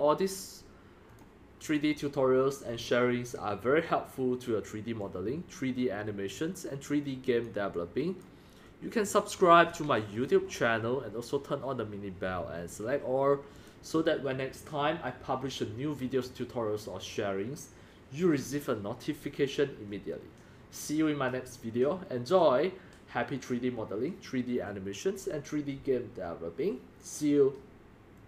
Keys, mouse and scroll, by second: 1.1 click, 1.6-5.0 drag, 5.2-6.3 drag, 6.3-7.8 right drag, 7.9 right drag, 8.2-9.7 drag, 10.3 click, 11.0 click, 12.8 middle click, 12.8 click, 12.9 middle drag, 13.0 click, 13.5 middle click, 13.6 scroll down 5, 14.0 click, 28.2 click.